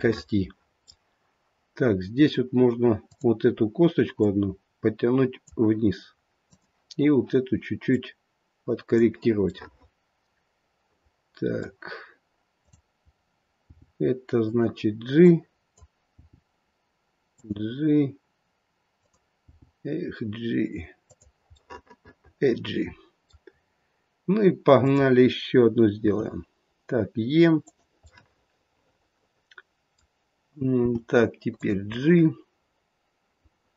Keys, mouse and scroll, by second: 3.0 click, 4.2 click, 6.4 click, 7.9 click, 9.5 middle click, 12.5 click, 13.6 g, 15.1 click, 16.1 g, 18.9 click, 19.4 g, 21.6 middle click, 22.0 middle click, 23.4-24.7 scroll down 1, 24.7 click, 24.7 scroll down 1, 26.0 e, 28.2 middle click, 30.8 g, 31.9 middle click.